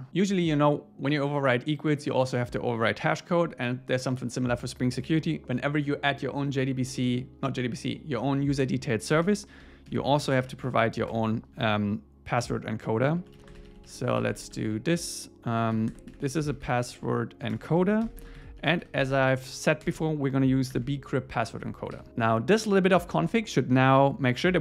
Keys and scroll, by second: 9.2 Return, 9.9 alt+l, 10.7 Return, 17.6 Return, 19.8 Return, 21.6 ⟲, 22.0 super+s.